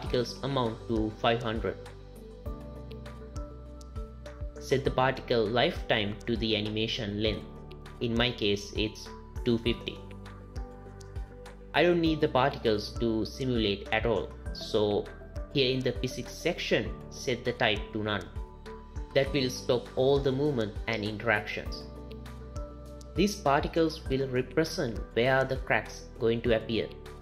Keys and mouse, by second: 0.3 KP_0, 2.8 click, 2.8 KP_0, 6.6-9.5 drag, 12.3 space, 13.2 space, 15.9 click, 17.1 click, 17.9-18.4 drag, 19.7 click, 20.6 space, 21.8 space, 22.6 click, 24.5 drag.